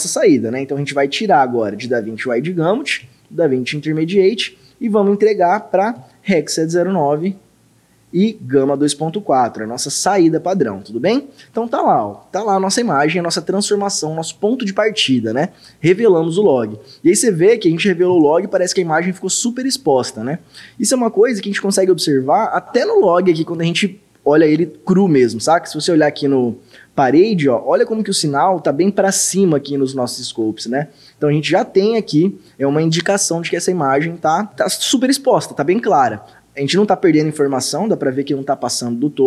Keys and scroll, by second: 3.0 d, 6.0 r, 8.6 g.